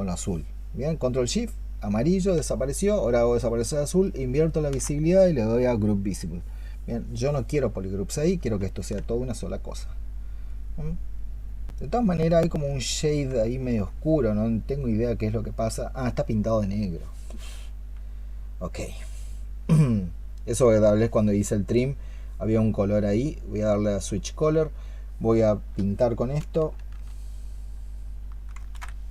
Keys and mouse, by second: 3.9 ctrl+shift+click, 8.6 ctrl+click, 13.4 alt+click, 29.0 ctrl+z.